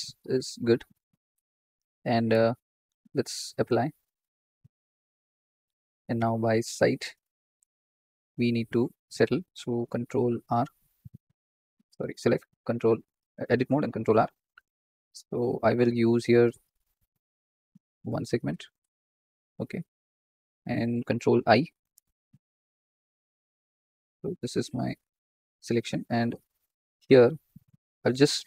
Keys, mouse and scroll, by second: 3.6-6.1 drag, 6.1 KP_3, 6.7 z, 7.4-7.9 scroll up 3, 7.9-10.2 shift+middle drag, 10.2 ctrl+r, 11.8 click, 12.1 Tab, 13.3 ctrl+r, 21.3 ctrl+i, 23.7 1, 24.2 ctrl+click, 24.8 ctrl+click.